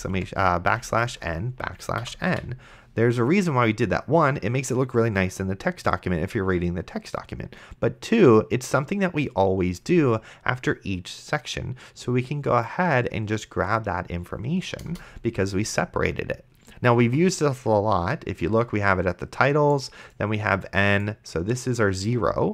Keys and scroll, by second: 0.0-0.7 typing, 2.0 End, 2.3 ;, 15.2 Return.